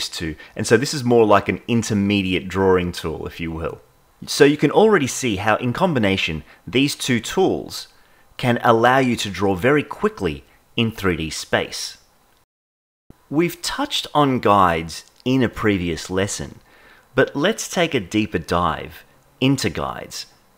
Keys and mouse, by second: 0.4 click, 2.8-4.2 shift+middle drag, 7.1 click, 8.9 click.